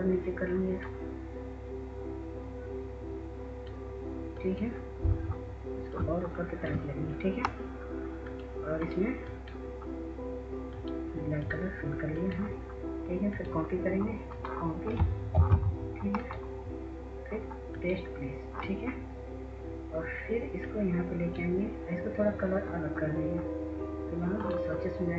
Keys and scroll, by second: 15.6 ctrl+c.